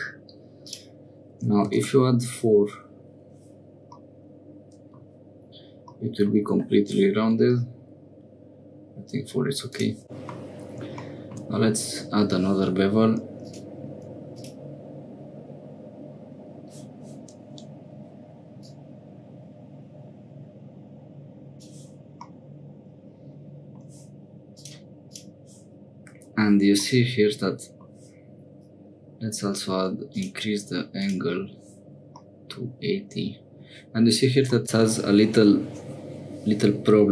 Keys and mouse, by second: 0.7-2.3 drag, 4.0-5.1 middle drag, 6.0 middle click, 9.7 click, 10.0 middle click, 13.4 click, 14.3 click, 18.6-21.6 drag, 22.3-23.8 middle drag, 24.5 click, 25.1 click, 26.8 middle click, 30.1 click, 31.0 click, 32.2-33.6 middle drag, 34.6-36.6 middle drag.